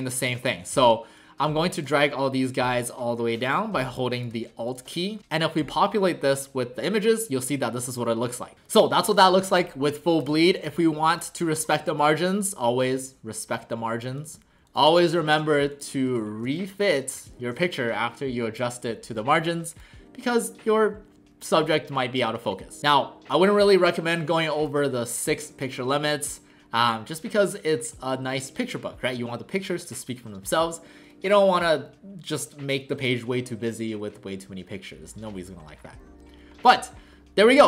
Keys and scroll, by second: 0.3 v, 12.0 w, 14.6 ctrl+alt+shift+c, 15.2 ctrl+alt+shift+c, 16.2 ctrl+alt+shift+c, 17.4 ctrl+alt+shift+c.